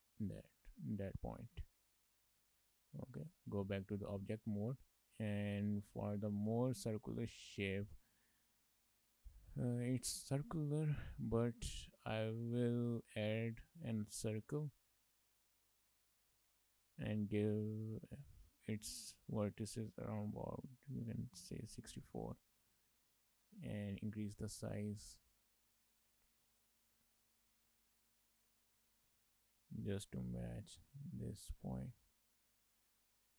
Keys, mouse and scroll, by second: 0.7 scroll down 3, 0.9 shift+middle click, 1.1 middle click, 2.4 shift+middle click, 2.7 shift+middle click, 3.4 Tab, 4.0 shift+middle click, 4.3 middle click, 6.0 shift+middle click, 6.3 middle click, 6.9 shift+middle click, 7.2 middle click, 8.2 shift+middle click, 9.6 shift+middle click, 9.9-10.3 scroll down 1, 10.3 middle click, 11.1 shift+middle click, 11.6 middle click, 12.5 shift+middle click, 12.8 middle click, 13.4 shift+middle click, 13.6 middle click, 14.0 shift+a, 16.5 shift+middle click, 16.7 middle click, 18.1 shift+middle click, 18.3 middle click, 19.4 click, 23.1 middle click, 24.1 s, 26.5 middle click, 28.1 click, 29.1 s, 31.9 scroll down 1, 32.0 middle click, 33.2-33.3 scroll up 1.